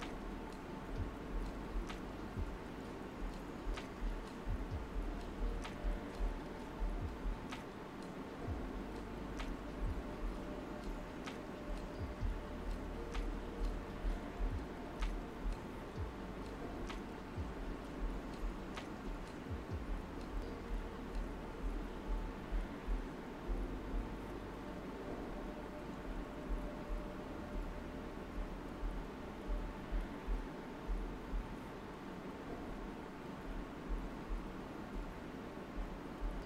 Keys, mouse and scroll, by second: 0.1 click, 0.5 space, 2.1-12.1 drag, 13.4 right click, 14.1 alt+right click, 15.9-26.5 drag, 26.5 alt+right click, 30.8-36.4 drag.